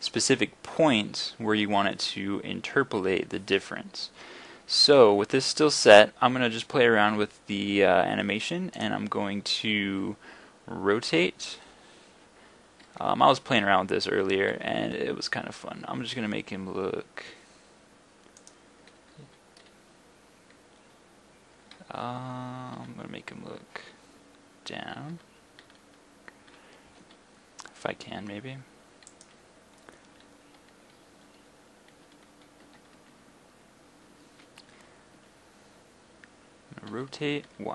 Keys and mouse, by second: 11.2 r, 19.3 r, 30.1 y, 32.7 g, 35.2 y, 36.9 r.